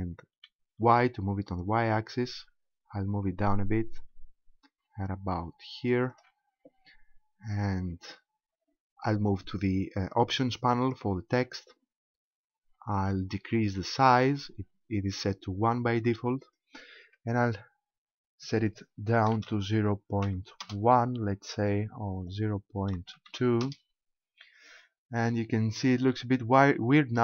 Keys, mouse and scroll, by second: 6.2 shift+click, 6.9-7.9 scroll up 4, 10.8 click, 12.2-12.6 scroll up 2, 12.6-12.9 scroll down 4, 13.3-14.0 scroll down 2, 16.5 click, 22.2 click, 25.1-25.5 scroll up 4.